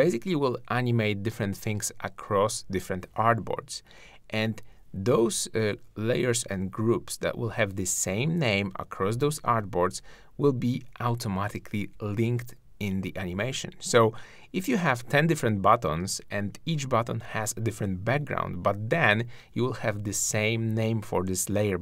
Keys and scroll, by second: 6.7 super+g, 9.5 shift+super+g, 10.0 super+g, 11.8 shift+super+g, 14.7 super+r.